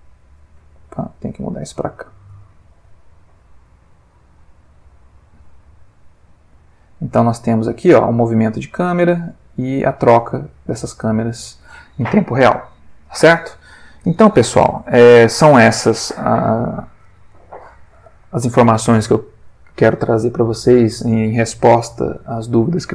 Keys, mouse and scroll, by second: 0.4 click, 1.1 click, 1.4 g, 3.4 click, 3.9 click, 4.2 g, 5.2 click, 5.7-11.8 drag.